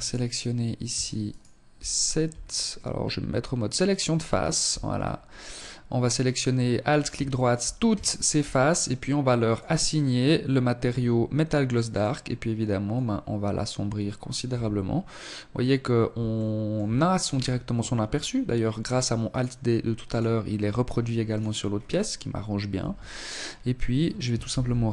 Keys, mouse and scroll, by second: 0.1 alt+shift+right click, 0.7 alt+right click, 1.2-1.5 scroll up 4, 2.5 click, 3.3 alt+right click, 3.7 scroll down 4, 6.1 shift+middle click, 6.9 shift+middle click, 8.3 click, 10.7 click, 13.3 Tab, 15.2 shift+middle click, 16.1 scroll down 5, 18.2 right click, 19.0 right click, 20.3 right click, 20.5-21.8 scroll up 10, 21.6 Tab, 23.3 ctrl+r.